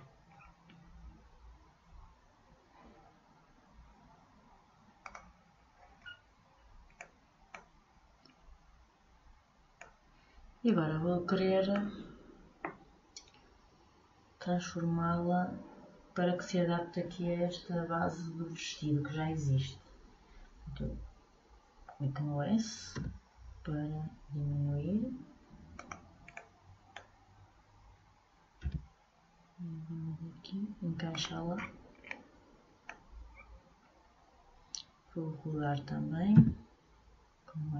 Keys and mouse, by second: 0.1 middle click, 5.2-6.8 drag, 6.8 middle click, 26.5 click, 31.7-36.6 middle drag.